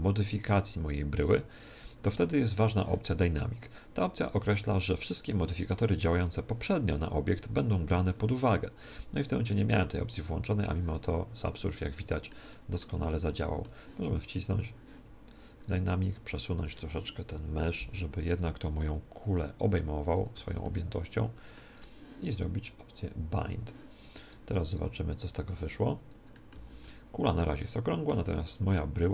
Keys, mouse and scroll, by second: 1.8 right click, 11.6-14.6 middle drag, 14.6 click, 15.6 middle click, 15.6 right click, 17.2 KP_1, 18.4 g, 19.4 click, 19.6 s, 20.3 z, 20.6-22.2 middle drag, 21.7 click, 21.7 right click, 22.1 right click, 22.9 click, 24.2 right click, 25.6 right click, 26.3-29.1 middle drag, 26.5 z, 29.0 Tab.